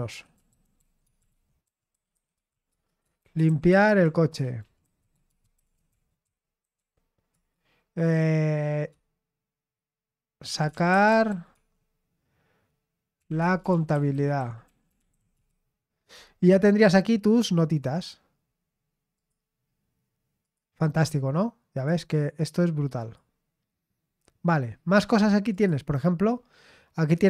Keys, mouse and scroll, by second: 0.0-7.3 typing, 10.5-11.5 typing, 13.0-15.3 typing, 16.8 click, 17.8-19.7 drag, 19.7 middle click, 20.4 click, 21.8 click, 23.0 click, 24.4-25.5 scroll down 1, 25.5 click, 26.0-26.5 scroll down 1.